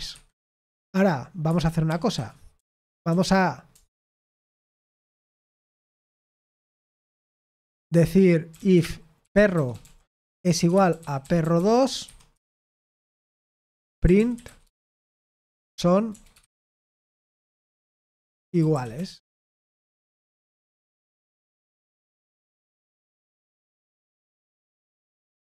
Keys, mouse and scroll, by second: 0.0-3.0 typing, 1.4 Escape, 4.1 ctrl+n, 4.9 ctrl+n, 5.7-6.7 typing, 8.2-25.4 typing, 24.8 Escape.